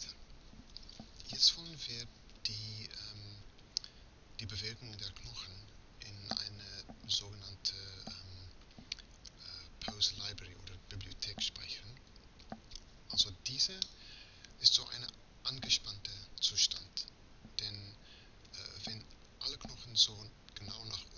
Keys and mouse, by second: 2.3-6.0 middle drag, 11.8 a, 12.1 a, 13.9-16.4 drag, 17.2-20.5 middle drag.